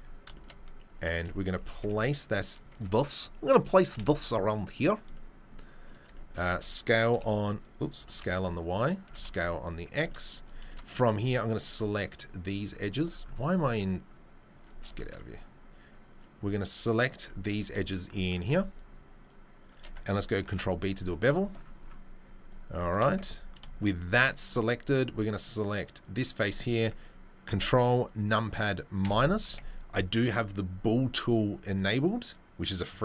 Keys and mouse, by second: 1.5 g, 2.7 Tab, 2.7 `, 3.9 s, 6.5 s, 11.0 2, 11.3 click, 12.8 click, 14.6-16.2 shift+drag, 14.6 right click, 15.1-16.2 right drag, 20.4 ctrl+b, 23.2 Tab, 29.1 ctrl+KP_Subtract, 32.0 click.